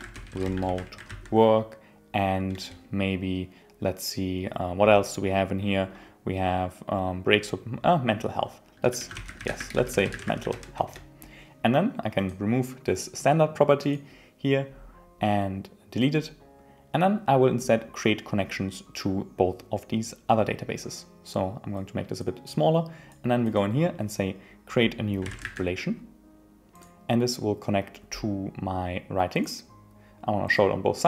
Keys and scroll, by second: 2.5 Return, 10.8 Return.